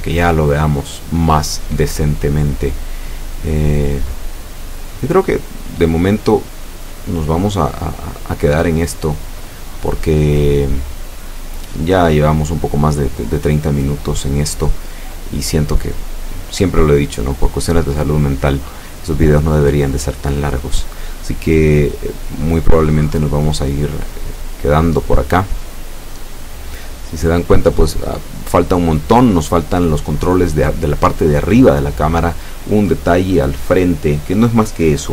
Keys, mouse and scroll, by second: 0.3 right click, 1.8 click, 3.7 click, 4.8 scroll down 1, 5.3-5.7 scroll up 1, 7.8-8.1 scroll down 1, 8.8-11.0 drag, 11.1-13.9 drag, 14.0 scroll down 1, 14.4-17.2 drag, 17.9-18.2 scroll up 1.